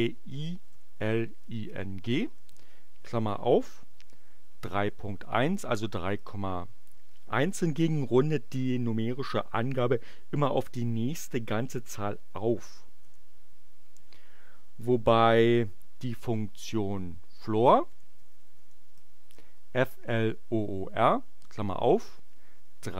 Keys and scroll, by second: 0.5-2.4 typing, 4.3-6.3 typing, 13.1 Return, 17.4-19.3 typing, 22.5 3.